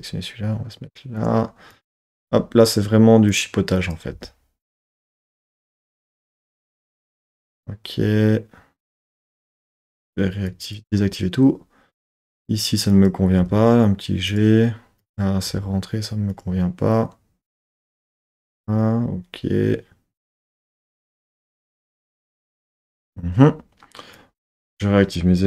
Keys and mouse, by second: 1.2 click, 1.7 click, 2.0 g, 3.3 click, 4.2 g, 4.9 click, 5.4 click, 5.6 g, 6.2 click, 6.3 z, 7.8 middle click, 8.2 middle click, 8.6 middle click, 10.5 click, 13.0 click, 14.2 click, 15.0 click, 15.5 g, 16.3 click, 24.2 click.